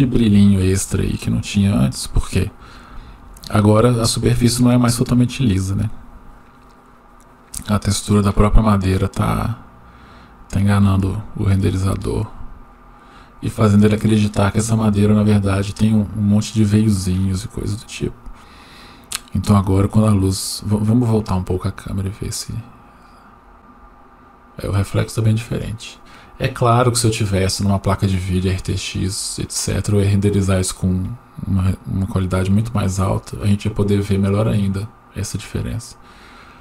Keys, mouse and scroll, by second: 9.4-11.6 drag, 20.1-20.6 scroll down 2, 20.9-21.2 scroll down 1, 21.2-23.1 middle drag.